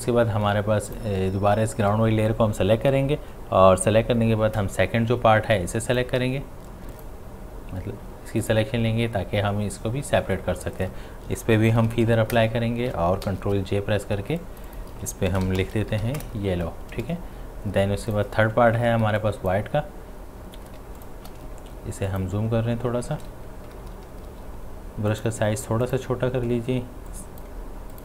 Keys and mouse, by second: 0.9 click, 5.5 click, 5.6-6.9 drag, 11.2 click, 11.7 shift+F6, 12.4 Return, 13.3 ctrl+j, 14.4 click, 15.1-16.5 typing, 18.1 click, 20.8 space, 21.0 ctrl+click, 23.7-24.6 typing, 25.1 click.